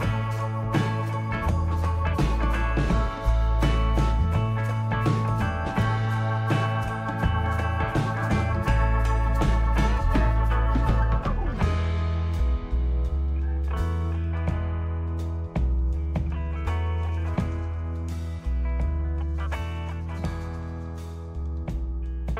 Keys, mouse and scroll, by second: 1.9 right click, 3.0 right click, 7.9 shift+a, 11.5 shift+s, 14.0 shift+a, 17.7 s, 21.3 right click.